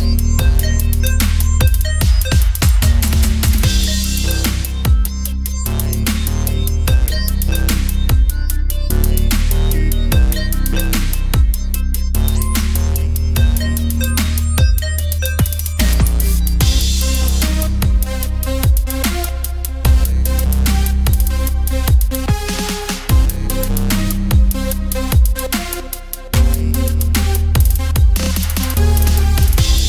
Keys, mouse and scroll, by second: 0.5-2.2 typing, 3.2 middle click, 4.0 Tab, 4.1 r, 5.9 middle click, 6.3 Tab, 7.5 alt+s, 8.2 middle click, 9.1 Tab, 10.1 alt+c, 10.7 Tab, 11.2-13.1 drag, 13.1 middle click, 13.3 a, 13.4 a, 14.1 click, 14.5 middle click, 14.7 click, 15.2 click, 15.5 f, 16.0 click, 16.7 f, 16.9 middle click, 17.2 ctrl+r, 18.3 ctrl+r, 19.4 middle click, 19.8 Tab, 20.0 KP_1, 24.2 middle click, 24.8 click, 26.3 KP_1, 27.7 Tab, 28.7 click.